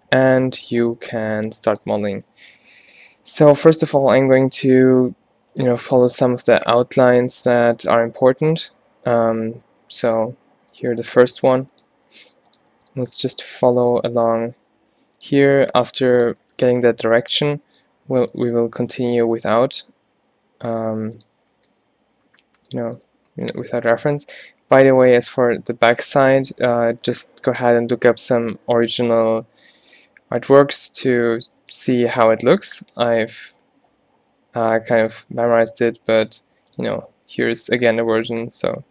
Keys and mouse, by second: 1.1 g, 2.3 o, 3.6 z, 5.0 g, 5.8 z, 6.3 g, 7.2 z, 7.7 click, 8.5 z, 10.2-13.5 typing, 14.6 e, 15.8 g, 16.5 click, 20.2 e, 27.6 middle click, 27.9 h, 29.8 ctrl+z, 30.7 g, 36.5-37.9 middle drag.